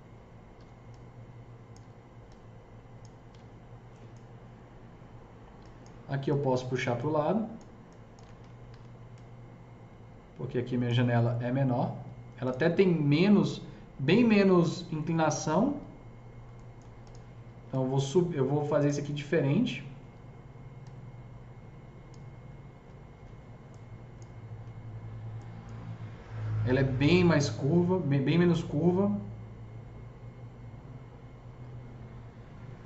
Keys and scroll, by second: 0.5 Delete, 8.6 ctrl+s, 23.2 Delete.